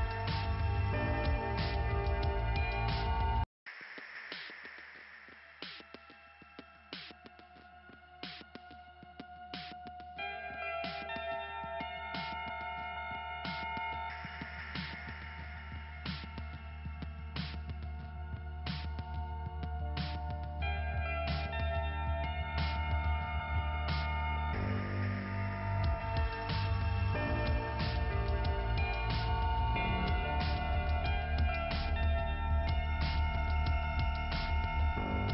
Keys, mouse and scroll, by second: 0.0 click, 2.2 click, 5.8 click, 6.6 click, 6.8 click, 7.2 click, 8.6 click, 9.8 click, 10.8 click, 11.6 right click, 12.3 click, 13.2 click, 15.6 click, 16.0 click, 16.5-17.0 scroll down 1, 17.0 click, 18.0 scroll down 1, 19.2 click, 20.2 click, 21.7 click, 22.7 click, 26.0 scroll up 2, 27.6 click, 28.6 right click, 29.5 click, 29.6 click, 31.1 click, 32.2 click, 32.2 click, 33.1 click, 33.7 right click, 34.3 click, 35.1 click.